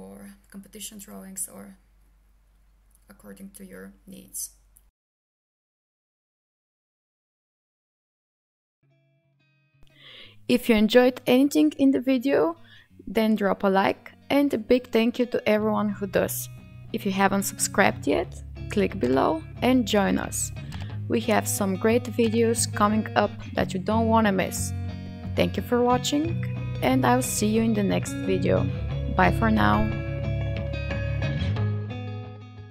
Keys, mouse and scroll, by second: 4.9 click.